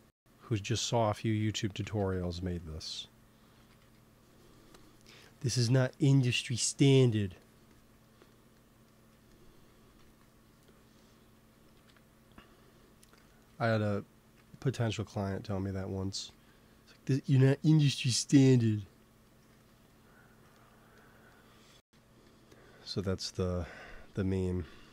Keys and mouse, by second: 1.7 shift+c, 2.0 f, 3.5 shift+c, 3.7 f, 5.1-6.1 drag, 7.3-11.3 drag, 9.9 ctrl+s, 11.2 KP_1, 11.6 KP_3, 16.0 g, 16.2 f, 16.9 f, 17.4-19.0 drag, 19.4 ctrl+s, 21.6 f, 22.2-24.1 drag.